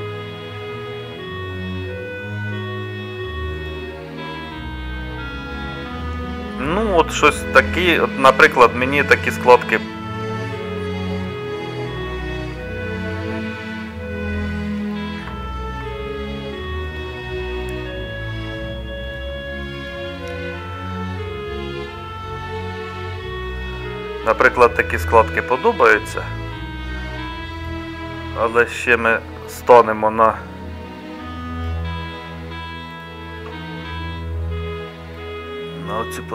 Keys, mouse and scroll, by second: 9.0 middle click.